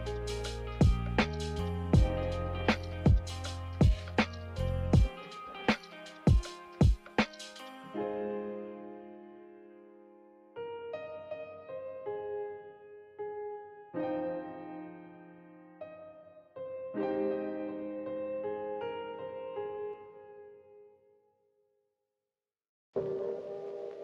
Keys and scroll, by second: 2.0 z.